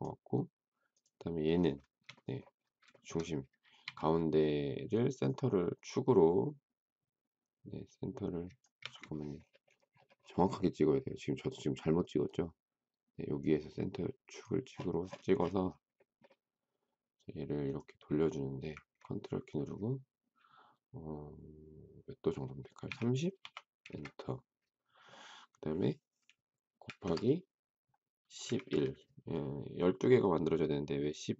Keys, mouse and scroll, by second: 1.7 shift+middle click, 2.9 shift+middle click, 3.0 shift+middle click, 3.8 q, 8.7 Escape, 22.8 3, 23.2 0, 23.8 Return, 26.8 shift+8, 28.4 typing.